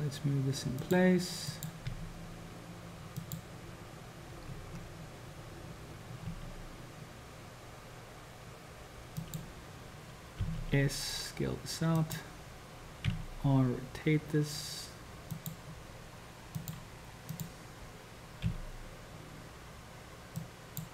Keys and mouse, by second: 1.6 click, 2.0 g, 6.4 g, 10.4 s, 13.1 r, 16.7 click, 18.5 g.